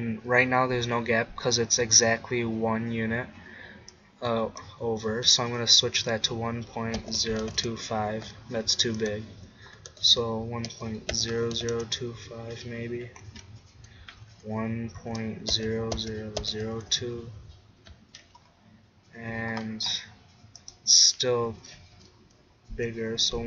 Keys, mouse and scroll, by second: 18.6-20.6 middle drag, 20.6-22.5 drag.